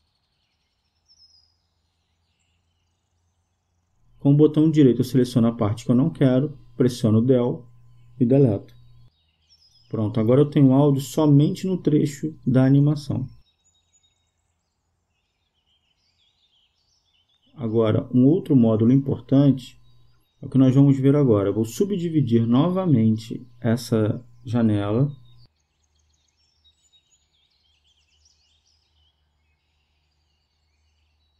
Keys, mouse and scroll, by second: 5.0 right click, 8.0 Delete, 9.4-11.4 drag, 15.7-17.4 drag, 18.9-20.8 drag, 28.7-30.6 drag.